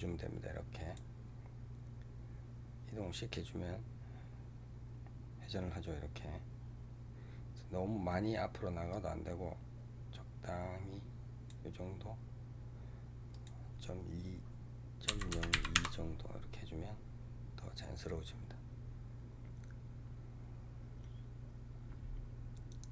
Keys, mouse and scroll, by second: 8.8-11.9 drag, 13.2-16.2 drag.